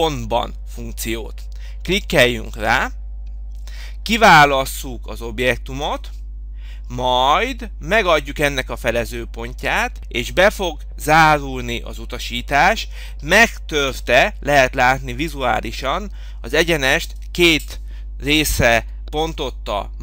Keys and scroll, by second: 19.1 Escape.